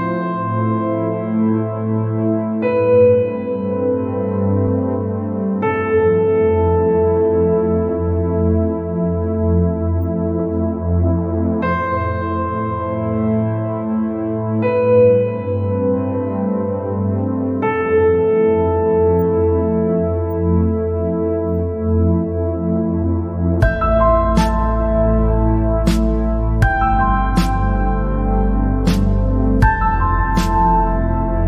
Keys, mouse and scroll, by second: 6.5 click, 6.9 scroll down 2, 7.3 scroll up 2, 7.6 scroll down 1, 7.7-9.5 middle drag, 9.5-11.1 drag, 11.1-11.5 scroll down 2, 11.6 scroll up 2, 12.1 scroll up 2, 12.5 scroll down 3, 12.9-14.0 middle drag, 14.0 scroll up 4, 14.2 scroll down 3, 14.4-15.6 middle drag, 15.6-16.1 scroll up 2, 16.5-18.2 drag, 18.2 scroll down 3, 18.7 scroll up 2, 19.0 scroll down 1, 19.2-20.4 middle drag, 20.4-21.7 drag, 21.7 scroll down 3, 22.1 scroll up 2, 23.4-23.9 scroll up 2, 24.0-24.6 scroll down 3, 24.7-25.8 middle drag, 25.8-26.2 scroll up 2, 26.2 scroll down 4, 26.4-27.5 middle drag, 27.5 scroll down 1, 27.7 middle click, 28.4-28.7 scroll up 3, 29.2 scroll up 2, 31.0 scroll up 2.